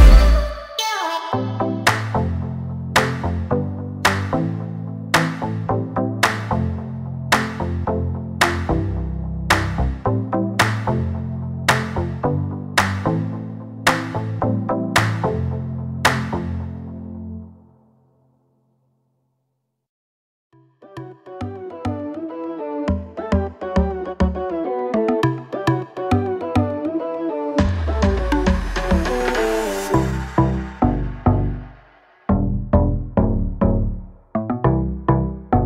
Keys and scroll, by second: 5.3 space, 9.5 r, 11.5-13.3 typing, 15.8 l, 18.2 space, 22.3 m, 23.7 space, 26.5 m, 27.8-29.2 typing, 30.8 Escape, 31.1 l, 33.9 space.